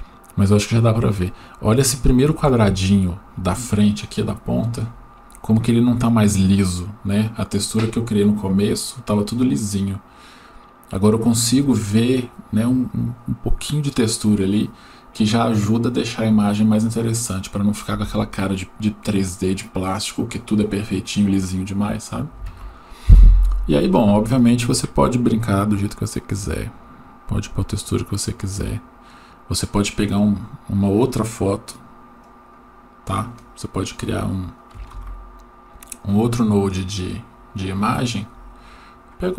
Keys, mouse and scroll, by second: 26.3-27.8 drag, 32.2-32.6 drag, 34.9 click, 35.0 shift+d, 37.0 click.